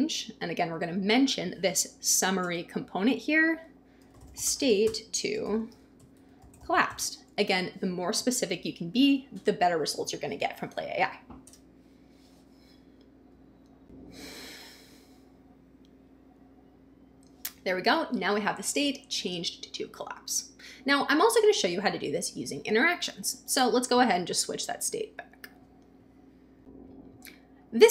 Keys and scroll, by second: 0.0-0.8 typing, 1.9 Down, 2.4 Return, 3.7-7.6 typing, 11.4 Return.